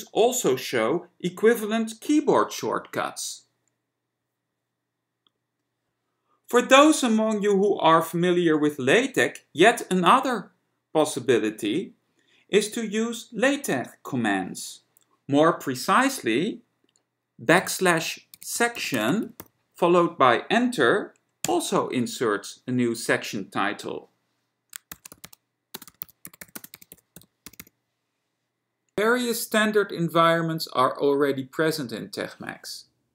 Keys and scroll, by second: 17.8 typing, 18.8-20.1 typing, 21.5 Return, 24.8-28.3 typing, 29.0 Return.